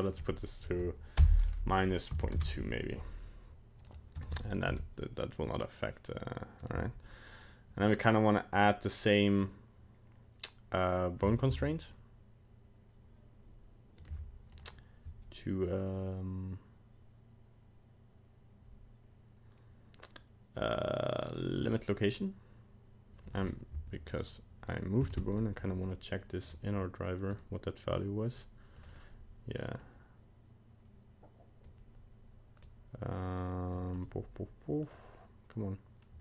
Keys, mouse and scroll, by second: 0.1 click, 3.9 right click, 4.2 ctrl+Tab, 4.4 right click, 4.8 g, 8.5 click, 9.4 click, 11.5 g, 14.5 click, 24.7 right click, 25.1 ctrl+Tab, 25.3 right click, 26.4 click, 27.3 right click, 28.9 click.